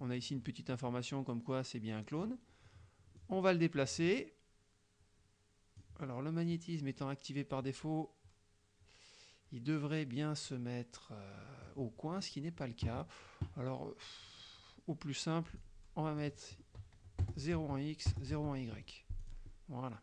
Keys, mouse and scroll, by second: 3.2-6.0 drag, 6.6-11.9 drag, 15.5 click, 16.3-16.8 drag, 17.3 KP_0, 17.6 Tab, 18.1 KP_0, 18.4 Tab, 19.3 click.